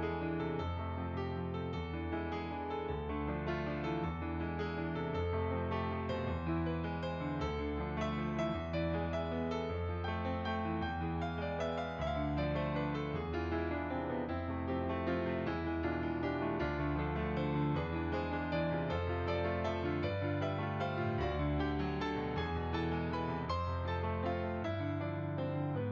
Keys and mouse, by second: 0.6 g, 1.6 click, 4.2 click, 6.2 g, 7.4 click, 7.7 g, 8.6 click, 15.4 click, 21.6 g, 21.6 click, 22.2 r, 23.0 click.